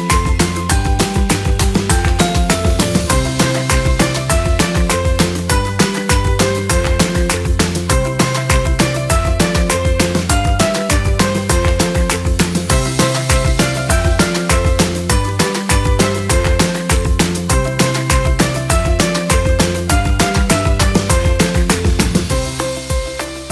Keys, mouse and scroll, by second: 1.1 ctrl+t, 8.7 double click, 12.9 alt+click.